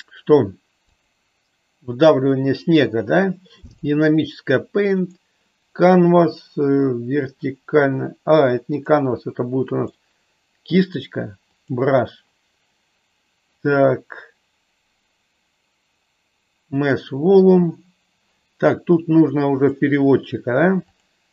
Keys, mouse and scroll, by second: 5.0 click, 8.8-9.9 drag, 11.8 click, 16.7-18.1 drag, 19.5-21.2 drag.